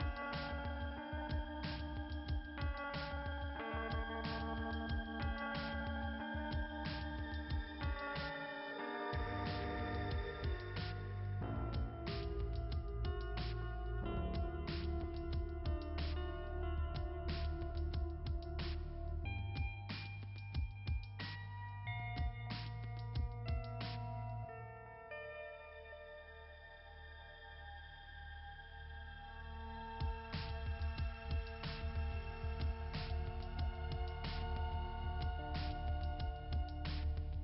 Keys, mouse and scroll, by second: 0.1 click, 0.6 click, 1.9 click, 3.1 click, 5.1 click, 6.7 click, 7.6 click, 10.0 click, 10.3 click, 12.1 click, 13.0 click, 14.0 click, 18.5 click, 19.0 click, 20.0 click, 20.2 click.